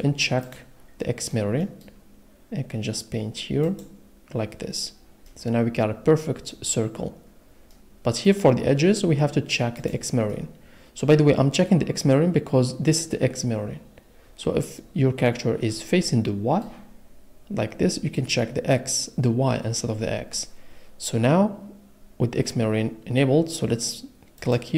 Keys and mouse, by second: 0.4 click, 3.7-5.2 middle drag, 5.2 click, 9.8 middle click, 14.8 middle click, 16.0 middle click.